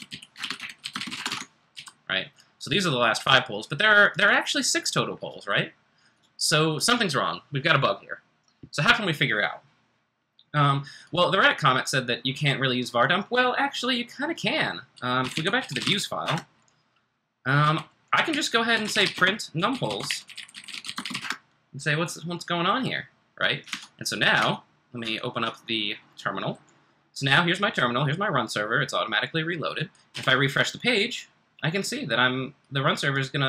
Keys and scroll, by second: 0.0-2.2 typing, 15.1-16.3 typing, 18.0-21.6 typing, 23.7 super+Tab, 24.3 super+Tab, 26.7 super+Tab, 30.1 r.